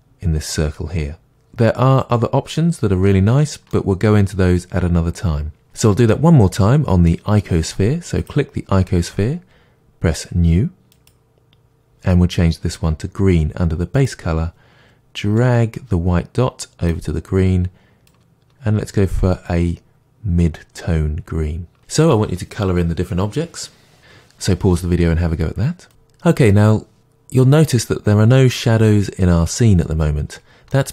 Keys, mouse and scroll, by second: 8.2 click, 11.0-15.4 drag, 28.5-30.9 middle drag.